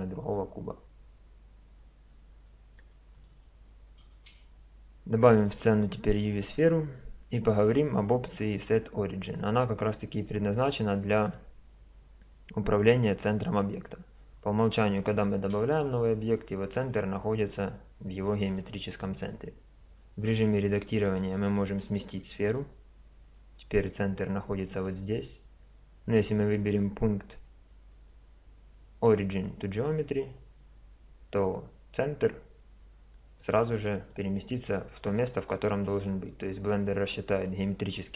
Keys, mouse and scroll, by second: 2.8 x, 4.2 shift+a, 6.3 middle click, 7.4-16.4 middle drag, 17.6-20.0 middle drag, 20.0 Tab, 22.7 click, 22.8 middle click, 23.4 Tab, 26.2-28.0 drag, 33.7-35.4 middle drag, 35.5-37.2 middle drag.